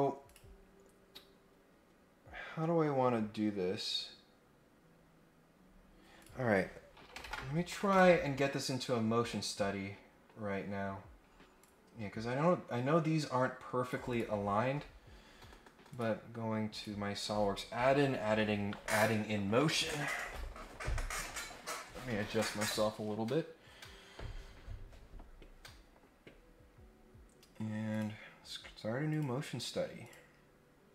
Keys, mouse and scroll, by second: 0.2 click, 6.2 click, 7.9 ctrl+Tab, 9.3-10.3 middle drag, 10.7 scroll down 2, 11.0 scroll up 2, 11.6-13.9 drag, 14.0 click, 15.9 click, 16.7 click, 26.3 scroll up 2, 26.6-27.0 scroll down 2, 27.1 scroll up 1, 27.9 click, 29.0 click, 30.0 click.